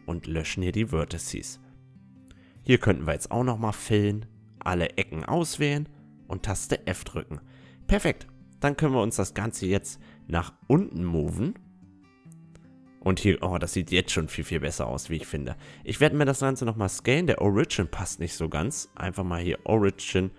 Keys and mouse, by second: 0.2 a, 2.4 Tab, 3.2 right click, 5.6 f, 6.1 Tab, 6.5-9.6 middle drag, 9.6-11.5 drag, 11.3-16.6 middle drag, 13.9 s, 16.6-19.1 drag.